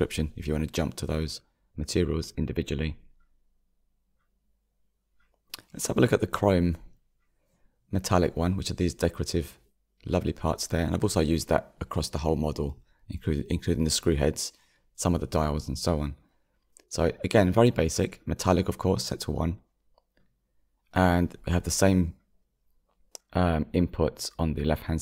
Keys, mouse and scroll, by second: 0.9-1.2 scroll down 2, 1.9 click, 2.7-4.4 middle drag, 4.4 click, 5.0-5.7 scroll up 5, 5.7-21.0 shift+middle drag, 21.0-23.2 drag, 23.2-25.0 shift+middle drag.